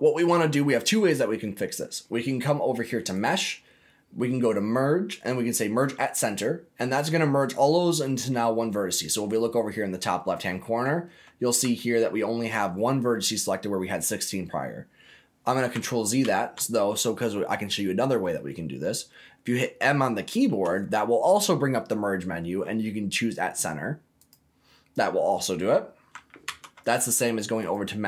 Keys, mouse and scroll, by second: 3.1-6.1 drag, 6.9-8.1 middle drag, 16.2 ctrl+z, 18.8 middle click, 20.4 m, 24.9 middle click, 26.4 ctrl+z, 27.6-28.0 drag.